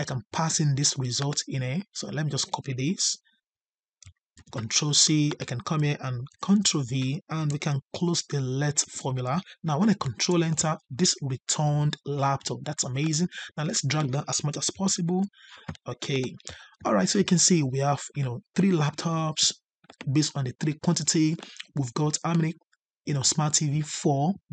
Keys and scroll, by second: 4.3 ctrl+c, 6.2 ctrl+v, 9.9 ctrl+Return, 14.6 ctrl+Up.